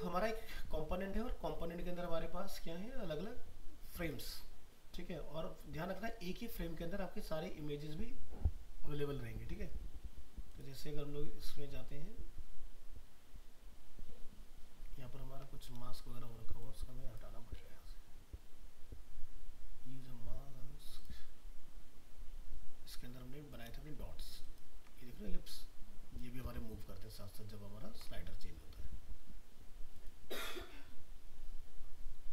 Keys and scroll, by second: 24.0 ctrl+space, 26.9 ctrl+-.